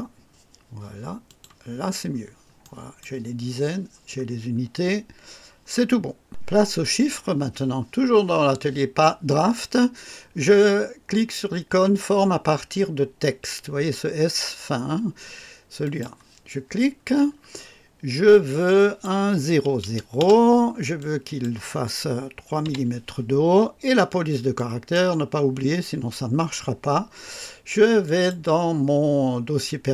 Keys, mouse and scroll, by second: 1.2 click, 1.7-2.3 scroll down 1, 2.6 right click, 4.1-4.4 scroll down 2, 15.8 click, 18.6 click, 19.8 KP_0, 20.1 KP_0, 20.9 click, 22.6 KP_3, 24.5 click, 28.0 click.